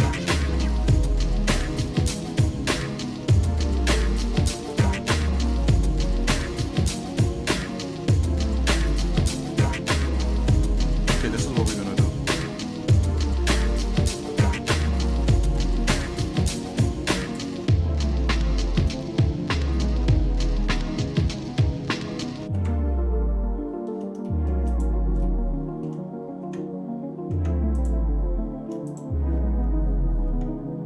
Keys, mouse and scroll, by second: 4.4 ctrl+z, 4.9-5.9 shift+middle drag, 6.2 middle click, 6.7 shift+middle click, 7.7 middle click, 8.2 shift+middle click, 9.6 middle click, 10.2 scroll down 2, 10.6 middle click, 11.1 shift+middle click, 12.4 middle click, 13.5 shift+middle click, 15.3 ctrl+l, 18.3 shift+middle click, 19.0 middle click, 19.7-21.2 shift+middle drag, 22.4 alt+c, 24.3 shift+middle click, 24.7 click, 25.2 shift+middle click, 26.4 Tab, 27.5 Tab, 27.7 click, 28.9 shift+click, 30.3 Tab.